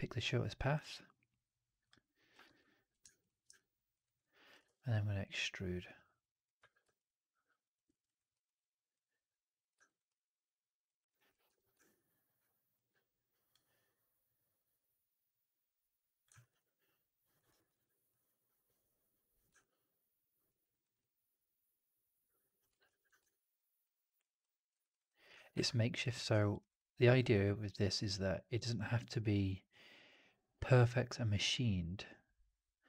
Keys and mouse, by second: 1.8 ctrl+shift+click, 2.3 ctrl+z, 3.4 alt+click, 3.9 right click, 4.1 click, 4.5 ctrl+e, 5.3-6.4 drag, 6.5 w, 6.9 alt+click, 7.7 middle click, 7.9 right click, 8.2 click, 9.4 click, 9.7 alt+right click, 9.9 alt+click, 10.9 alt+right click, 11.0 alt+click, 11.4 4, 11.6 click, 14.4-16.1 drag, 16.3 alt+right drag, 16.5-17.2 alt+drag, 17.4 alt+right drag, 17.5 alt+right click, 19.1 click, 19.5-20.4 alt+drag, 20.5 alt+right drag, 20.7 alt+right drag, 20.9-22.5 alt+drag, 22.8 ctrl+z, 23.2 drag, 23.7-24.1 drag, 24.3 alt+drag, 24.6 alt+right drag, 24.8 alt+right click, 24.9 alt+drag, 25.4 ctrl+s, 26.2 alt+drag, 26.5 alt+right drag, 26.6-27.1 alt+drag.